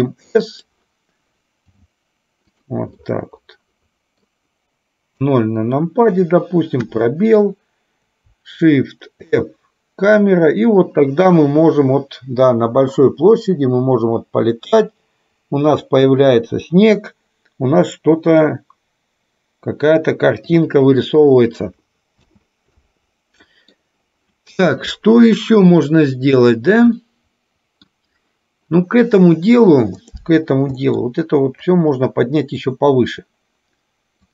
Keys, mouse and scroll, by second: 1.7 g, 3.0-4.5 middle drag, 5.2 KP_0, 6.9 space, 9.4 shift+f, 20.6 Left, 22.2 space, 22.9-23.6 middle drag, 23.7 middle drag, 27.1-28.0 middle drag, 30.9 middle click, 31.7-32.9 drag, 34.2-34.3 drag.